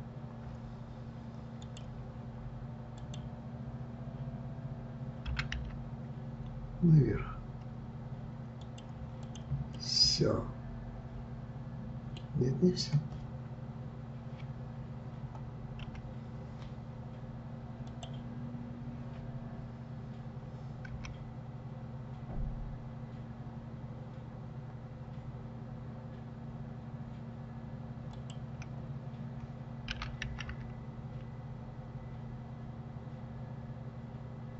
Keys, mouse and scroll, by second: 3.0 click, 5.3 g, 9.2 click, 9.7-12.7 middle drag, 15.8 KP_7, 17.8 click, 20.9 g.